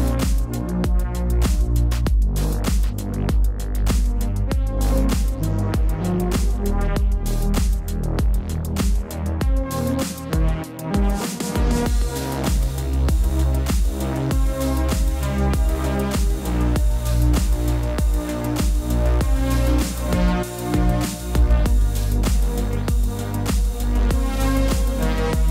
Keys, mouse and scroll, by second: 3.6 click, 11.5 click, 16.2 scroll down 1, 16.9 click, 17.3-17.9 scroll down 1, 18.4 click, 24.2 click.